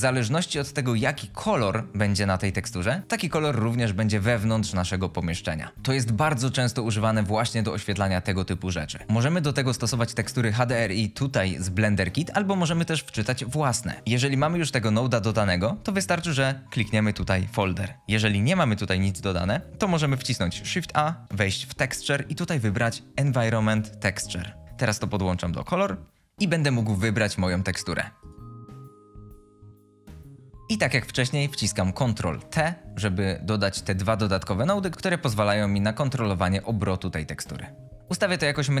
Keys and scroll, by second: 9.0 0, 19.2 Delete, 20.4 a, 32.1 ctrl+t.